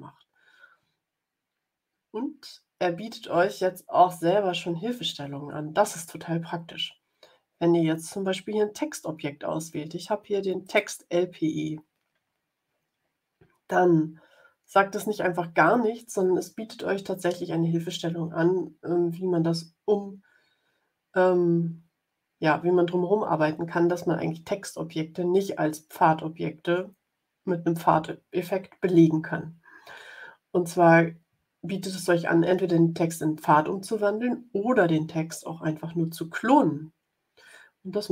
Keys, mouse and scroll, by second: 3.5-5.2 drag, 10.6 click.